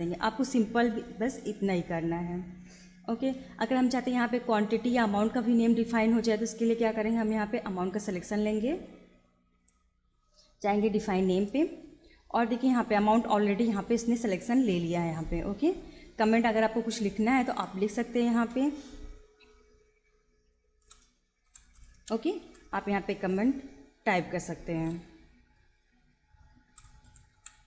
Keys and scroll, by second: 20.8-23.2 typing, 26.5-27.6 typing.